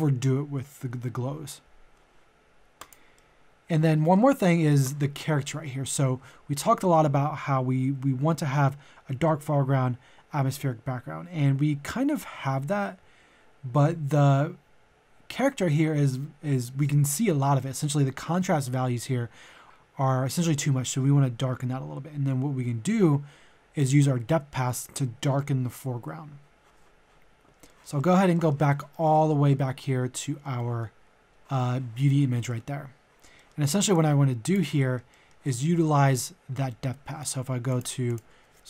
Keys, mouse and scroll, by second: 2.8 click, 3.1-5.5 middle drag, 27.5 scroll down 1, 27.6 middle click, 29.5-29.9 scroll up 1, 30.1 middle click, 31.0-31.4 scroll up 1, 31.4 middle click, 33.9 click, 34.8 middle click, 37.7 click.